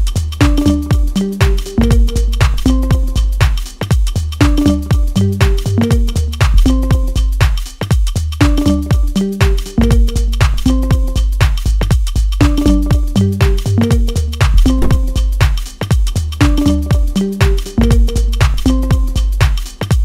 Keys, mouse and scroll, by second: 1.0 ctrl+z, 1.4 e, 2.4 scroll up 2, 2.6 shift+middle click, 3.3 click, 4.4 click, 4.7-5.3 scroll up 1, 5.3 click, 6.4 s, 7.0 g, 9.1 Tab, 9.4-9.8 scroll down 1, 9.8 click, 10.0 scroll down 1, 10.3 middle click, 11.2 Tab, 12.3 click, 13.0 click, 13.5 click, 14.6-15.8 middle drag, 15.8 click, 16.4 click, 17.3 click, 18.2 click, 19.9 click.